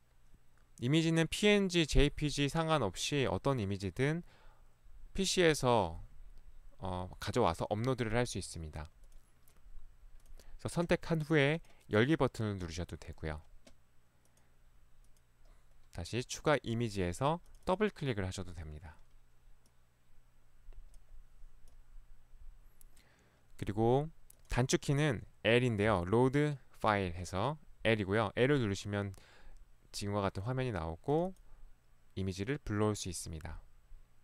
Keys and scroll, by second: 25.9 i.